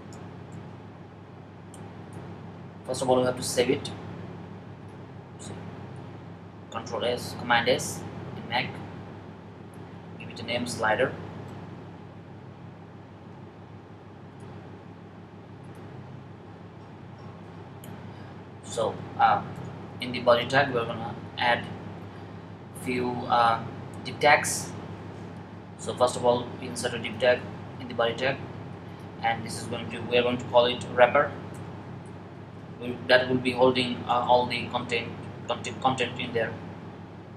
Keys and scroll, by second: 0.0-0.5 typing, 6.5 super+s, 10.0-11.7 typing, 30.9-32.9 typing, 33.9 typing, 37.0 r.